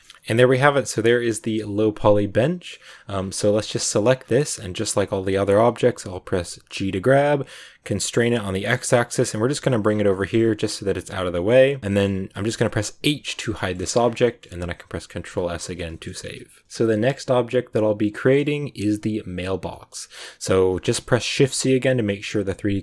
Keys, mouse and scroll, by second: 0.0-1.4 shift+middle drag, 1.4 scroll down 1, 1.5-2.7 middle drag, 2.7 a, 2.8-3.9 scroll down 2, 3.9 right click, 4.1-5.4 scroll down 2, 5.4 scroll up 2, 6.7 g, 9.8 scroll down 2, 10.0 g, 11.3-12.9 shift+middle drag, 12.9 h, 13.5 shift+middle click, 13.7-14.1 scroll up 1, 14.1 shift+middle click, 15.1 ctrl+s, 15.8-16.6 scroll up 1, 16.6-20.7 shift+middle drag, 20.7 click, 21.2 shift+c.